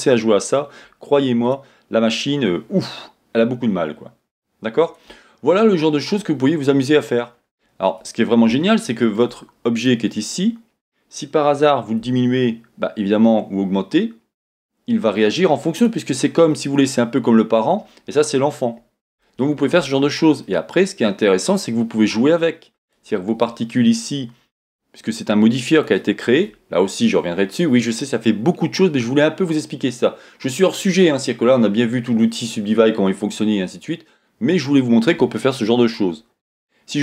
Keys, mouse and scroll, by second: 1.5-5.1 drag, 5.4 scroll up 1, 6.8 scroll down 1, 8.5-9.8 shift+middle drag, 9.2 shift+scroll up 1, 9.8 click, 10.3 scroll up 1, 12.1 s, 15.8 click, 15.9 click, 16.1 scroll down 1, 19.2-22.9 shift+middle drag, 20.0-20.5 scroll down 1, 21.9-22.9 scroll up 2, 22.9 click, 25.7 click, 35.6-37.0 middle drag.